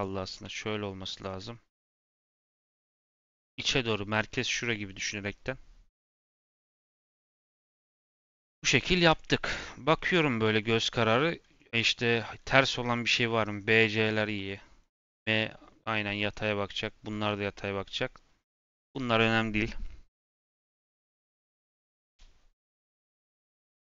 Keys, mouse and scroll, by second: 0.2 r, 1.5 r, 8.3 Tab, 9.0 click, 9.5-10.7 middle drag, 10.7 scroll up 2, 11.1-12.9 middle drag, 12.9-13.8 scroll up 1, 13.8-17.5 middle drag, 17.5-17.9 scroll down 2, 17.9-18.3 middle drag, 18.3-19.0 scroll down 2, 19.0-20.5 scroll down 1, 20.5-22.0 scroll down 1.